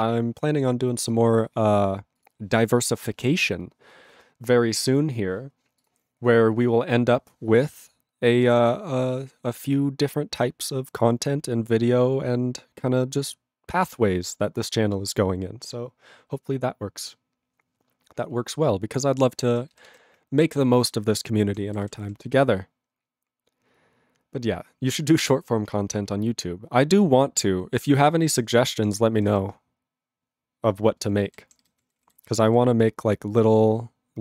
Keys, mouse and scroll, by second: 1.2 ctrl+b, 2.2 click, 2.2 click, 8.3 click, 8.4 click, 19.6 ctrl+e, 19.7 ctrl+b, 19.8 ctrl+b, 21.5 ctrl+p, 21.7 ctrl+n, 21.8 ctrl+n, 22.0 ctrl+p, 28.2 ctrl+n, 28.3 ctrl+n, 28.5 ctrl+p, 28.6 ctrl+p, 28.9 ctrl+p, 29.1 ctrl+n, 29.3 ctrl+n, 31.0 ctrl+p, 31.3 ctrl+n, 31.4 ctrl+p, 31.7 ctrl+n, 31.7 ctrl+p, 31.8 ctrl+n, 31.9 ctrl+p, 32.0 ctrl+n, 32.2 ctrl+p, 32.5 ctrl+n.